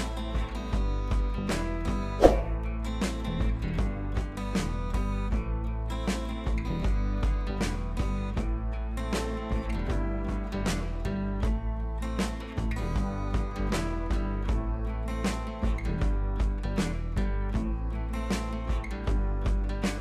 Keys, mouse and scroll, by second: 16.7 click, 17.9 shift+F2, 18.6 b, 19.5 [, 19.6 [.